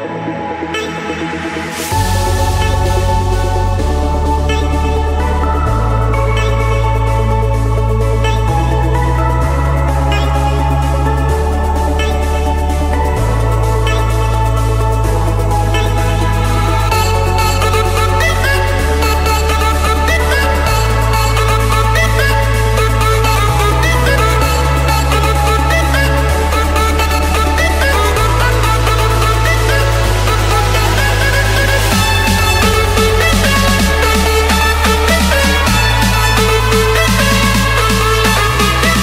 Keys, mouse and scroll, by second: 2.4-3.5 drag, 3.9-5.0 middle drag, 5.0 Escape, 7.1-8.2 drag, 8.4 Escape, 8.6 Escape, 8.8 Escape, 9.4-12.4 typing, 11.0 Return, 13.0 Escape, 13.3 Escape, 14.7 click, 15.8 click, 16.0-16.6 scroll down 4, 16.6-17.1 scroll up 9, 17.1-18.7 scroll down 18, 17.9 Escape, 18.7 c, 20.3 Return, 21.1 click, 24.9 typing, 25.0 Return, 28.8-30.8 typing, 31.2 Return, 32.1 Escape, 32.3 Escape, 35.5 click, 38.4 click.